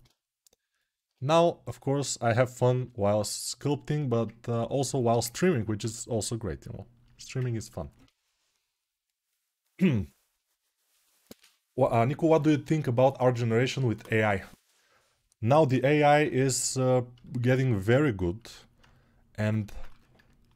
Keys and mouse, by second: 16.1-20.5 alt+right drag.